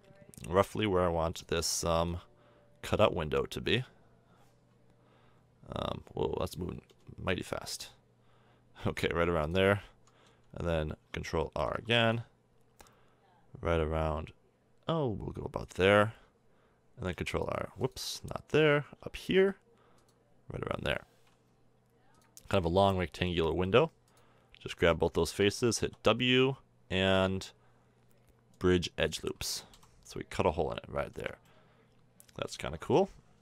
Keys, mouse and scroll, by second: 1.7 ctrl+r, 11.6 ctrl+r, 17.0 ctrl+r, 18.3 ctrl+z, 19.3 ctrl+r, 22.5 a, 23.9 click, 25.8 w, 26.0-26.8 drag, 29.4 a, 29.7 z, 30.0 middle click, 31.2 Tab, 33.2-33.4 middle drag.